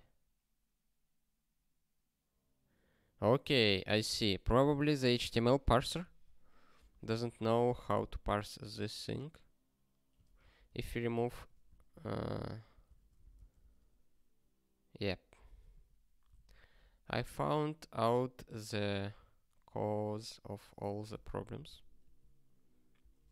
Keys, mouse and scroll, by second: 13.1 super+o, 14.2 ctrl+k.